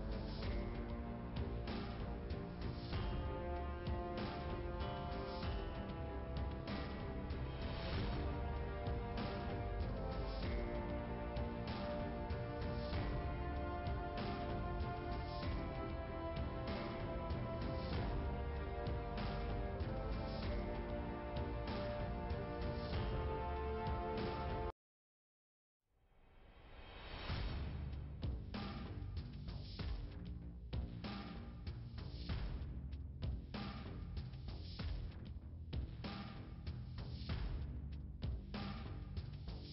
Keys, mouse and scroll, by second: 1.8-4.2 typing, 8.8 click, 9.4 BackSpace, 10.3 2, 10.9 Return, 14.2 click, 16.1 click, 17.3-17.8 typing, 18.3 Return, 20.6 click, 20.7 click, 22.9 click, 25.1 click, 25.7 click, 28.0 click, 30.0 click, 32.3 click, 35.5 click, 37.6 click, 37.7 click, 38.7-39.0 scroll down 1.